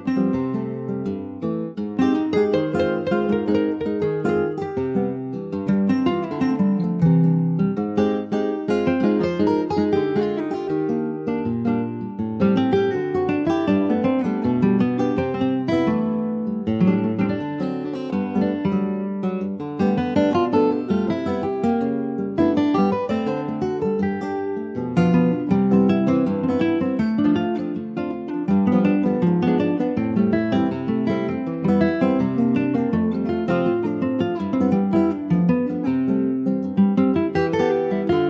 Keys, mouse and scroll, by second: 0.0 shift+s, 1.5 shift+a, 3.1 scroll down 3, 3.3 shift+middle click, 3.9 ctrl+s, 4.3 click, 5.4 alt+middle click, 5.6-6.6 alt+scroll up 5, 5.8 alt+z, 6.6 shift+middle click, 6.9 scroll up 1, 7.2 s, 11.0 alt+middle click, 11.4-11.9 scroll up 2, 11.9 shift+middle click, 12.5 s, 22.4 click, 25.6 middle click, 26.1 Tab, 26.5 middle click, 26.8-27.4 scroll up 2, 27.4 click, 28.7 3, 29.7 click, 30.2 ctrl+s, 30.5 alt+middle click, 30.8 alt+middle click, 30.9-31.5 alt+scroll up 1, 31.5 alt+middle click, 33.1 ctrl+s, 33.4 alt+middle click, 34.1 shift+middle click, 34.9 click, 36.3 Tab, 36.7 middle click, 37.0 alt+z, 37.4 click, 37.7 scroll down 4, 38.0 middle click.